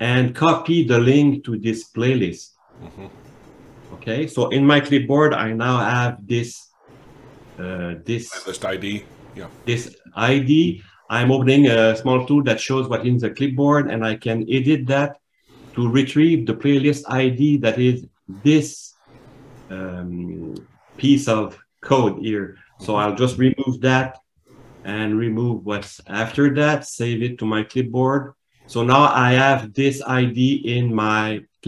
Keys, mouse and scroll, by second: 6.2 super+middle click.